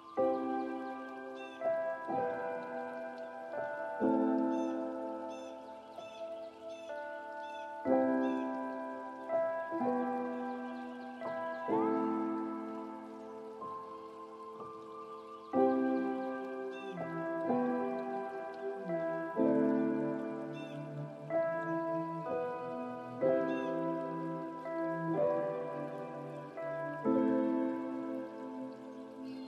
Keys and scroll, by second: 17.4 ctrl+a.